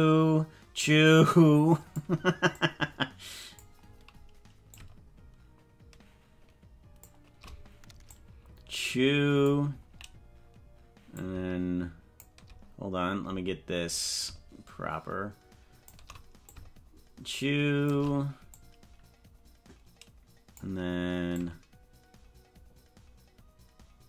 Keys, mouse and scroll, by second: 2.6-3.6 drag, 4.8-7.4 shift+drag, 8.2-9.6 drag, 11.2-12.2 shift+drag, 14.2-16.1 shift+drag, 16.5-18.1 shift+drag, 18.7-20.7 drag, 21.5-24.0 shift+drag.